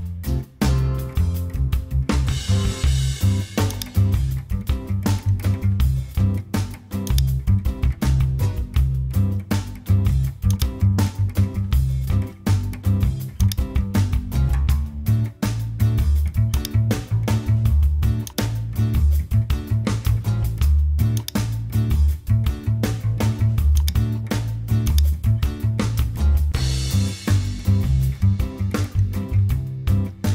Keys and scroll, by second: 0.0-1.3 typing, 22.9 super+t, 28.4 Return, 29.9 super+j.